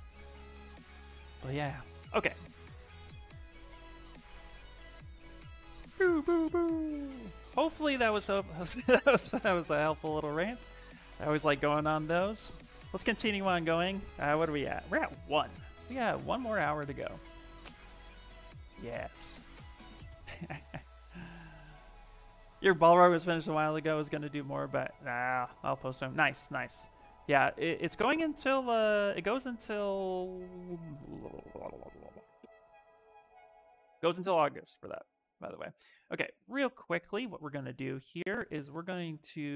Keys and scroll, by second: 18.4 s, 28.5 shift+f, 28.8 shift+f.